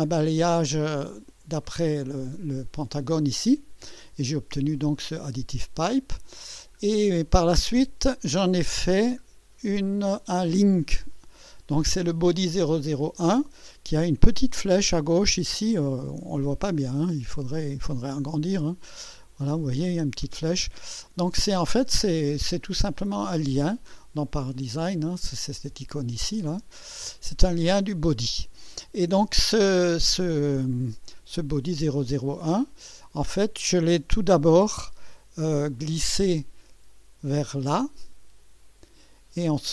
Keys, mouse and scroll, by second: 6.4-6.8 scroll down 2, 8.8 click, 9.3 scroll down 2, 10.6 click, 11.1 scroll down 1, 16.8 ctrl+scroll up 1, 18.3 alt+scroll up 2, 21.0-22.0 scroll down 4, 24.6 click, 25.2 click, 27.1 click, 31.1 click, 31.6 space, 32.5-34.0 drag, 34.7 1, 34.7 space, 35.8-36.5 drag, 37.6-38.4 drag.